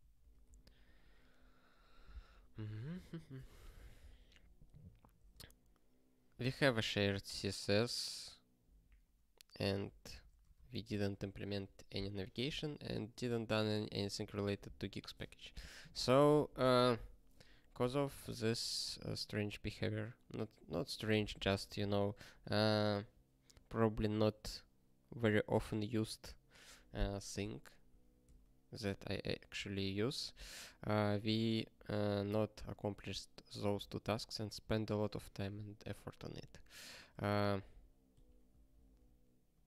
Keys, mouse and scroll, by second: 0.2 ctrl+k, 0.7 ctrl+s, 0.8 ctrl+p, 1.1 ctrl+p, 2.2 ctrl+e, 3.7 ctrl+p, 4.0 ctrl+p, 5.0 ctrl+a, 5.1 ctrl+space, 5.4 ctrl+n, 6.4 ctrl+g, 6.7 ctrl+space, 8.8 ctrl+e, 9.8 ctrl+b, 10.3 ctrl+space, 10.5 alt+b, 10.6 alt+b, 11.5 ctrl+g, 11.9 ctrl+n, 12.1 ctrl+a, 12.6 ctrl+n, 13.1 ctrl+space, 13.2 ctrl+p, 17.5 click, 18.2 ctrl+e, 18.4 ctrl+space, 18.5 ctrl+a, 28.2 ctrl+g, 32.1 ctrl+n, 32.5 ctrl+p, 32.9 ctrl+p, 33.7 ctrl+g, 36.3 ctrl+n, 36.5 ctrl+n, 37.1 ctrl+space, 37.2 ctrl+p, 37.5 ctrl+p, 38.1 ctrl+g, 38.5 ctrl+n, 38.7 ctrl+n.